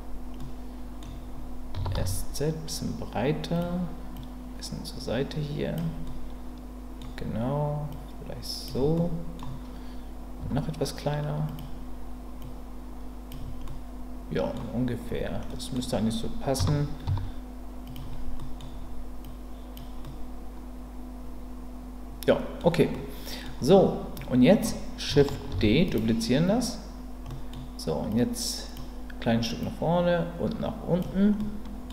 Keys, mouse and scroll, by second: 0.4-1.7 middle drag, 1.7 s, 1.9 x, 3.5 click, 4.2-5.7 drag, 7.9 click, 8.9 middle click, 10.4 s, 11.5 click, 12.5 click, 13.6 middle click, 15.5 middle click, 16.6 s, 17.0 z, 17.8 click, 18.4 middle click, 19.2 click, 20.0-22.6 middle drag, 22.9 middle click, 24.1 middle click, 25.5 shift+d, 27.3 middle click, 28.1 click, 29.6-31.0 drag, 31.4 middle click.